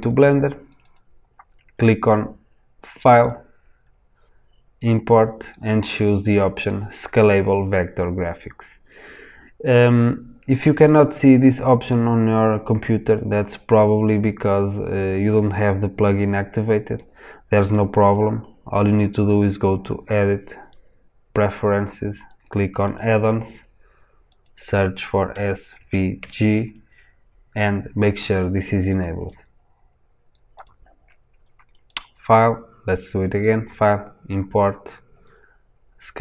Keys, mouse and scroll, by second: 0.7 click, 2.9-13.1 drag, 19.8-36.2 drag.